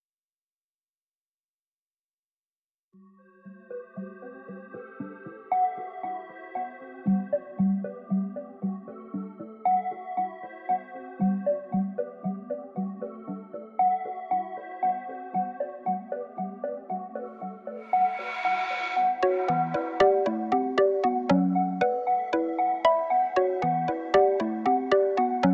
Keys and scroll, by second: 10.2-11.6 typing, 13.9 Return.